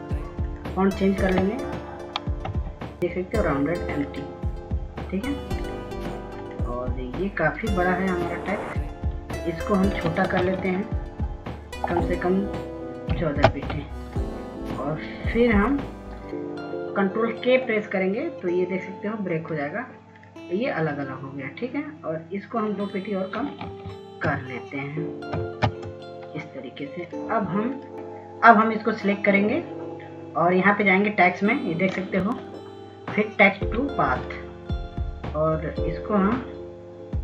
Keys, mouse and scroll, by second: 0.6 ctrl+v, 1.4 ctrl+space, 2.4 click, 11.3 ctrl+a, 12.8 KP_1, 14.1 KP_4, 16.0-24.4 drag, 24.6 ctrl+a, 26.4 KP_2, 28.0-33.6 drag, 33.9 ctrl+s, 35.8 click.